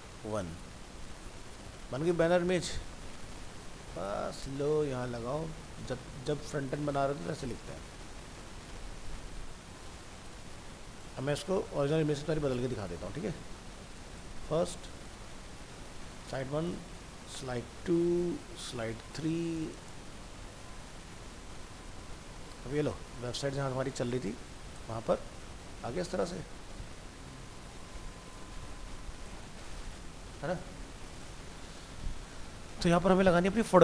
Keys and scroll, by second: 2.8 ctrl+c, 7.1 ctrl+v, 10.4 ctrl+v, 21.6 ctrl+s, 31.0 alt+Tab.